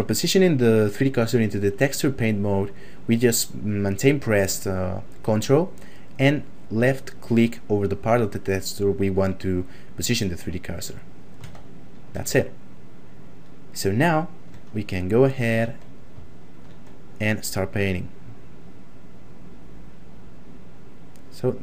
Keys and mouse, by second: 10.8 ctrl+click, 12.6 shift+middle click, 15.0 ctrl+middle click, 15.8 middle click, 16.3 shift+middle click, 17.2 click.